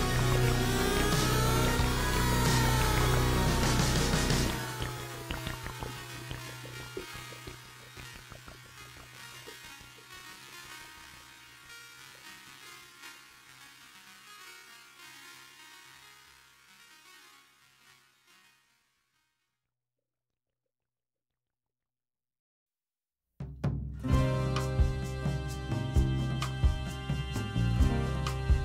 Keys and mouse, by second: 0.4 g, 10.7 middle click, 11.8 alt+z, 12.1 middle click, 12.8 alt+z, 13.0 middle click, 14.1 click, 14.5 middle click, 15.6 g, 17.8 middle click, 19.0-20.3 middle drag.